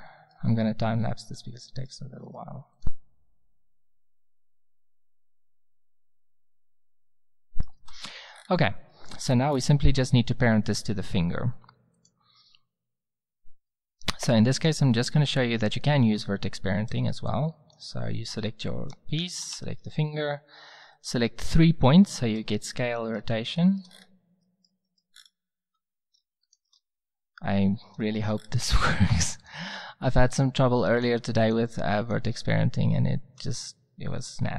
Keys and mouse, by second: 2.2 s, 3.0 z, 3.5 g, 3.7 z, 4.0 Tab, 4.8 click, 4.9 middle click, 5.2 ctrl+z, 5.3 click, 5.6-7.8 typing, 11.0 middle click, 11.3 middle click, 11.9-13.8 drag, 14.2 Tab, 14.5-16.5 drag, 17.6 click, 19.6 Tab, 22.9 middle drag, 23.6 middle click, 23.9 middle click, 25.1-25.6 middle drag, 25.6 z, 33.6 c, 33.8 middle click.